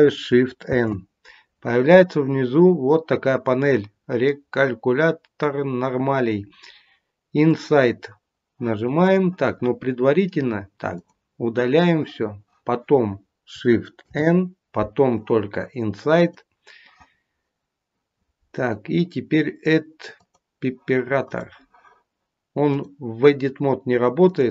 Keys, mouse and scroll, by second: 0.6 shift+n, 7.4 click, 8.9 click, 10.8 click, 15.2 shift+n, 16.2 click, 20.1 click, 21.2 click, 22.6 click.